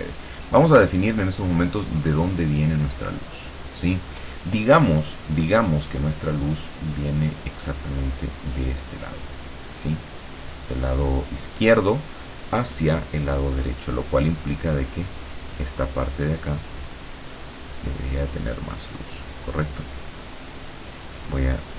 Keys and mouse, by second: 1.4-3.3 drag, 14.7-19.6 drag, 20.0-21.0 drag, 21.5 click.